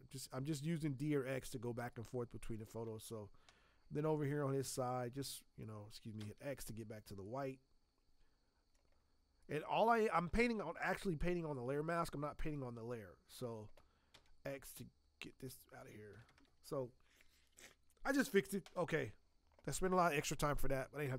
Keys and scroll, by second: 1.7 space, 6.1 x, 14.1 x.